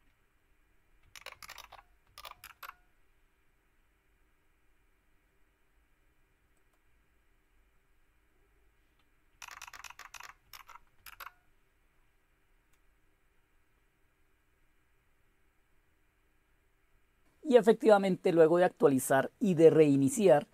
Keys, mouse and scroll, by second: 0.8-2.5 typing, 2.3 Return, 6.5 click, 9.3 Down, 9.5 Down, 9.7 Down, 10.0 Down, 10.4 Up, 10.9 Return.